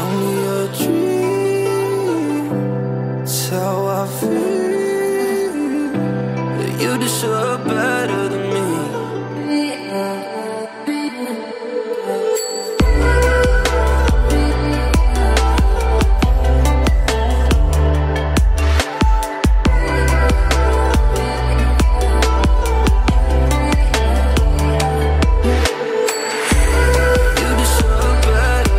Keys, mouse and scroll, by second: 1.5 click, 6.9 click, 9.0 shift+click, 9.7 ctrl+g, 11.6 click, 13.0 ctrl+j, 14.1 click, 15.9 right click, 16.5 click, 18.0 space, 18.2 click, 18.3 space, 19.0-19.3 alt+scroll up 1, 19.9-20.5 ], 20.6 ], 20.8 ], 21.2 click.